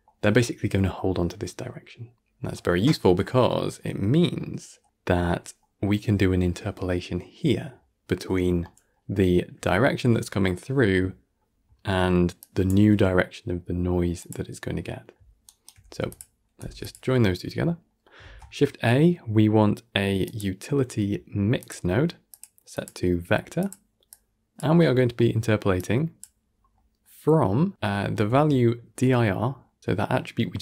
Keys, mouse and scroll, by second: 3.2-3.7 scroll down 2, 3.7-5.0 middle drag, 5.0-5.5 scroll up 7, 5.5-8.3 middle drag, 8.3 scroll down 6, 8.5-11.4 middle drag, 11.4-11.7 scroll up 3, 11.7-12.3 middle drag, 12.3 click, 12.6 g, 14.5 scroll down 3, 14.8-15.3 middle drag, 15.3 shift+right click, 15.7 g, 16.5 g, 17.3-17.8 scroll up 2, 17.8 middle drag, 18.1 shift+a, 22.6-24.0 drag, 24.7 scroll up 4, 25.0-25.6 middle drag, 25.6 drag, 26.4 scroll down 2, 26.6-28.2 middle drag, 28.2 shift+a.